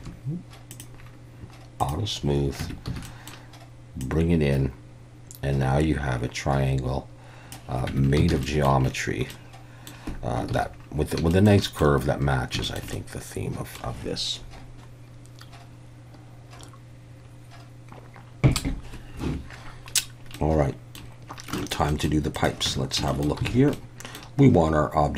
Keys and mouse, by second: 0.7 click, 1.8 click, 2.6 Tab, 2.9 a, 3.1 middle click, 4.1-7.5 drag, 7.9 Tab, 8.3 alt+a, 8.4 drag, 9.3-9.9 drag, 10.5 ctrl+s, 11.3 shift+middle click, 11.6 middle click, 12.7 shift+middle click, 12.9-13.8 middle drag, 20.4-21.0 middle drag, 21.6 shift+middle click, 21.9 middle click, 22.3 click, 22.7 Tab, 23.1 shift+middle click, 23.5 alt+a, 23.8 middle click.